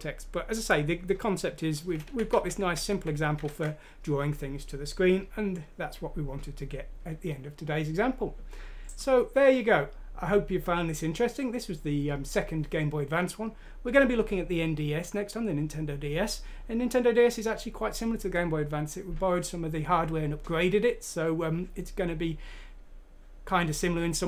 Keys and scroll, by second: 2.0 ctrl+z, 2.3 ctrl+z, 2.5 ctrl+z, 2.8 ctrl+z, 3.4 ctrl+z.